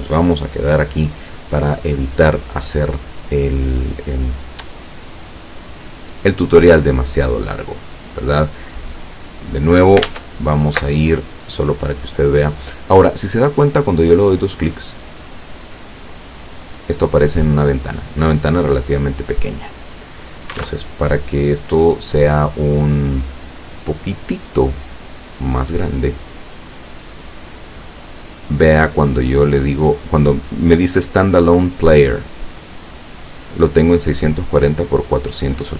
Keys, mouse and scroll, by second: 10.1 alt+Tab, 13.9 click, 15.9 click, 19.3 click, 20.3 click, 20.7 alt+Tab, 25.1 click.